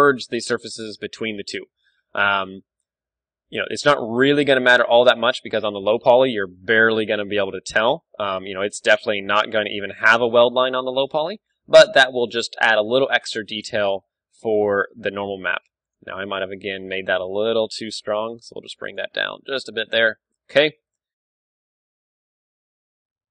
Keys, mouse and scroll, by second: 2.1 Tab, 2.2-3.6 middle drag, 2.3 z, 3.9-5.6 right drag, 4.2 z, 4.4 g, 5.6-7.0 drag, 7.0 g, 7.4 right click, 8.0 middle click, 9.0 s, 9.8 click, 10.1 Tab, 10.3-13.5 middle drag, 11.0 click, 12.5 KP_1, 13.2 ctrl+w, 13.7-15.6 middle drag, 14.4 Tab, 14.6 z, 16.0-18.9 right drag, 16.9 s, 19.0-20.6 drag, 19.1 z, 19.3 Tab, 19.9 ctrl+w, 20.6-22.2 middle drag.